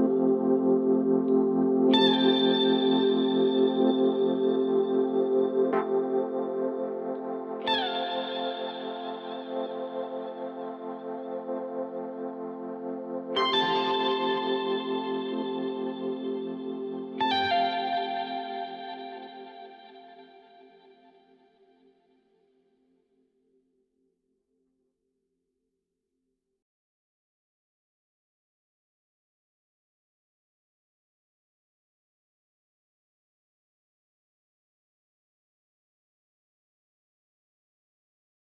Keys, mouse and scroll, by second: 4.5 s, 7.4-9.8 drag, 17.6 s, 22.9 drag, 24.4-27.5 drag, 30.6-31.2 drag, 32.6-33.4 scroll up 4, 33.8-34.7 scroll down 4, 36.7-38.4 drag.